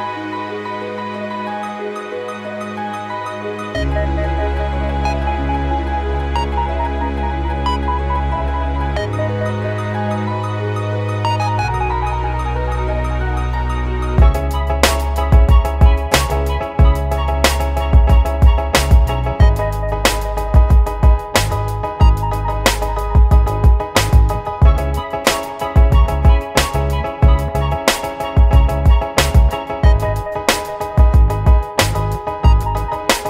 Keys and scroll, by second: 18.6 Up, 18.8 Up, 23.5 Down, 24.2 Up.